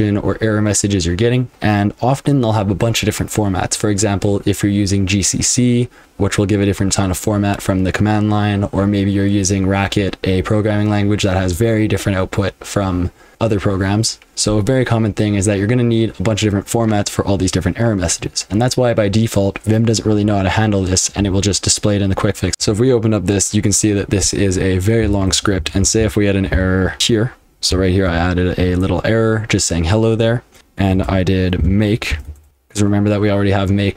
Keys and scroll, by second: 22.3-28.7 typing, 30.9-32.9 typing.